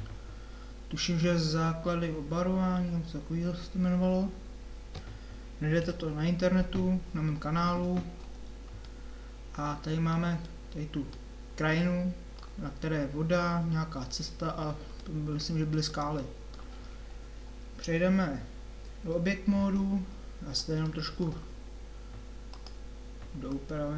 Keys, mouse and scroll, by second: 5.8 KP_7, 8.8-12.0 middle drag, 18.9 Tab, 20.3 middle click, 21.0 middle click.